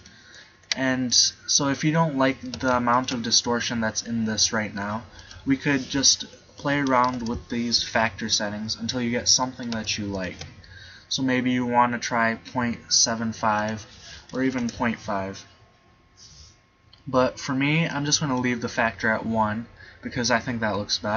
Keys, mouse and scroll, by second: 0.0 right click, 0.6 g, 4.6-6.9 middle drag, 7.2-8.5 scroll up 1, 8.9-10.2 middle drag, 10.2-11.3 drag, 13.2-15.2 middle drag, 15.5-17.9 middle drag, 19.8-21.0 middle drag.